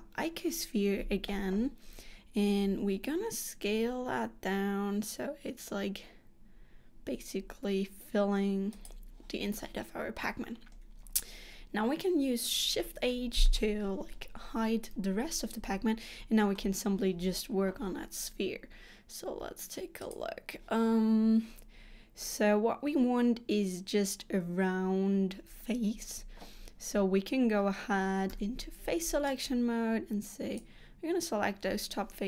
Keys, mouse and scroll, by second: 2.7 s, 13.2 shift+h, 15.4-15.7 scroll down 2, 15.7 middle click, 20.1 click, 28.4 3, 29.4 click.